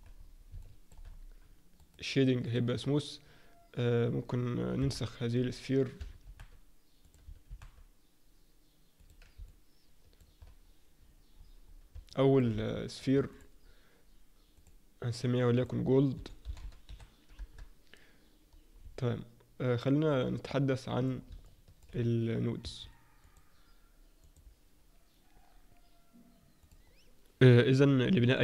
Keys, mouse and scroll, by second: 0.1-0.6 scroll up 3, 0.6 shift+middle click, 1.0-1.8 scroll up 2, 1.8 right click, 4.0-4.8 scroll down 2, 4.8 KP_7, 5.3-6.0 scroll down 1, 6.0 scroll down 1, 6.2 shift+d, 7.5 shift+d, 9.4 middle click, 11.4-11.9 scroll up 5, 12.1 middle click, 12.6 shift+middle click, 13.3 click, 14.5 click, 15.5 click, 20.1 click, 20.1 scroll down 1, 26.8 click.